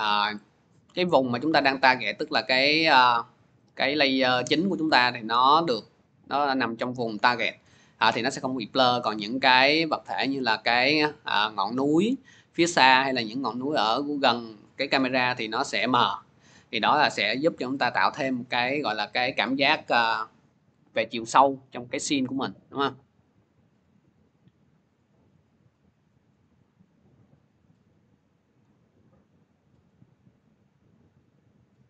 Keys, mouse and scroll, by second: 1.3-1.8 scroll, 6.3 click, 6.5-6.8 scroll, 7.0 click, 7.7 click, 8.3 click, 18.3 click, 20.6-22.3 scroll, 26.1 middle click, 28.4-30.4 drag, 28.9-30.4 middle drag.